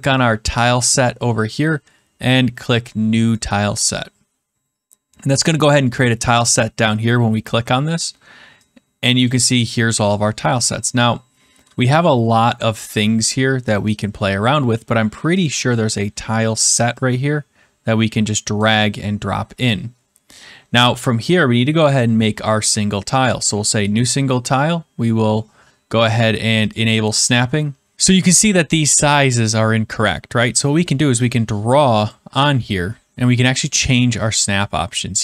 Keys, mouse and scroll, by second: 3.9 click, 5.5 click, 9.2 click, 11.4-12.1 scroll, 13.2 scroll, 14.2-15.2 scroll, 15.8 middle click, 16.0 middle click, 16.2-16.6 scroll, 18.5 click, 20.2-20.9 scroll, 23.3 click, 26.6 click, 32.0 click, 33.6 click.